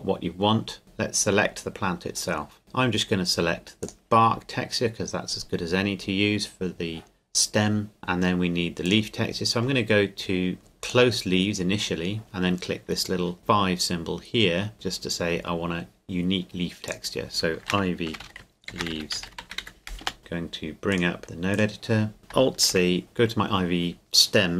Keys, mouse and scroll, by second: 0.8 right click, 2.6 click, 8.0 right click, 8.8 click, 10.8 click, 14.7-16.4 drag, 16.9 click, 17.6-19.6 typing, 20.0 Return, 20.2 click, 22.7 alt+c.